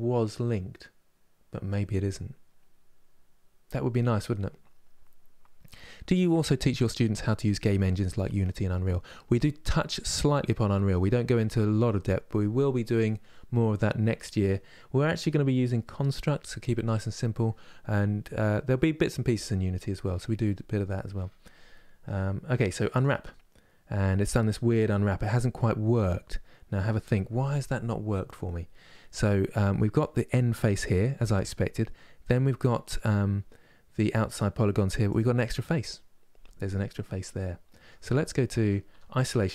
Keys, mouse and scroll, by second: 34.8 click, 36.7-38.6 middle drag, 38.6 KP_Divide, 39.2-39.5 middle drag.